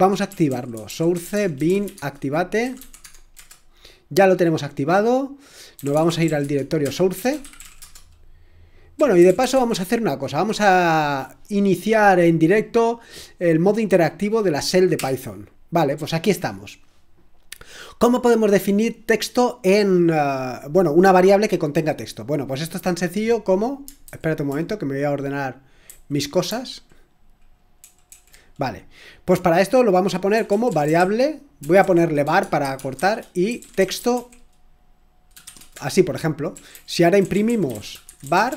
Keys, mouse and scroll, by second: 0.1-3.3 typing, 5.2-10.2 typing, 15.0 Return, 24.1 super+h, 25.8 shift+super+h, 27.8 super+l, 28.0 super+l, 30.0-38.5 typing.